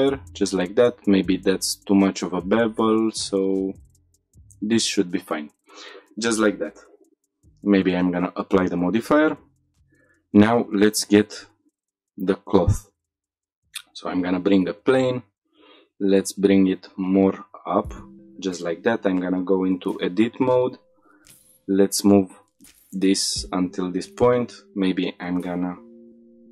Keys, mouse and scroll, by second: 3.8-5.3 right drag, 7.4 click, 9.8 shift+middle click, 9.8 scroll down 2, 10.6 scroll up 2, 11.0 shift+a, 14.2-14.5 scroll down 1, 14.6 g, 14.8 z, 16.7 click, 17.7-18.2 drag, 18.4 shift+middle drag, 18.8 Tab, 19.6 2, 19.9 click, 20.6 g, 20.9 x, 23.6 click, 24.4 click, 25.9 s.